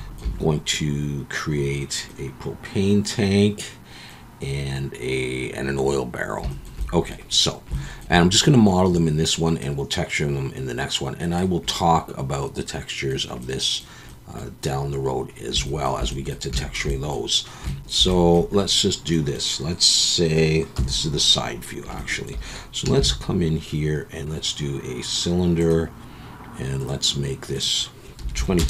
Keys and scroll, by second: 20.7 KP_3, 23.0 shift+a, 28.3 2.